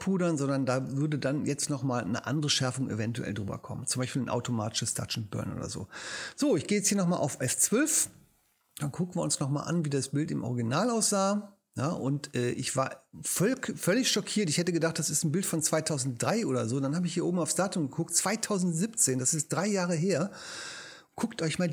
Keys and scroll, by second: 6.2 super+0, 7.4 super+F12.